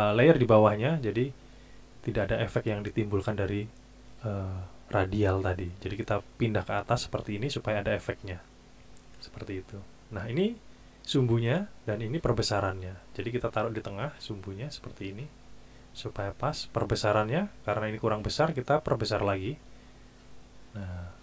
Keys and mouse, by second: 6.6 click, 14.1 click, 18.9 click.